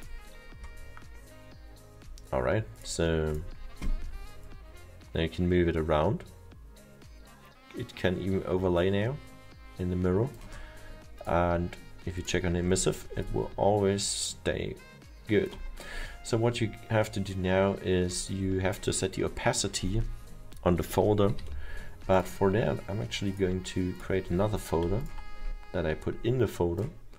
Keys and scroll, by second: 21.3 m, 21.5 m.